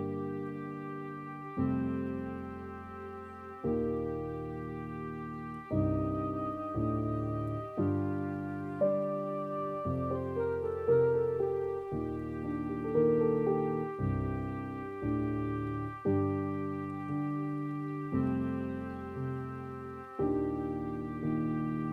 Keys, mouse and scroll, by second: 0.0 scroll up 2, 0.3-1.3 middle drag, 1.3 scroll down 2, 1.6 middle click, 2.1 scroll up 3, 2.4-4.1 middle drag, 4.1-5.1 scroll down 3, 5.1 scroll down 1, 5.3 click, 7.9-9.3 middle drag, 9.3-10.9 scroll down 2, 10.9 ctrl+alt+KP_0, 12.3 n.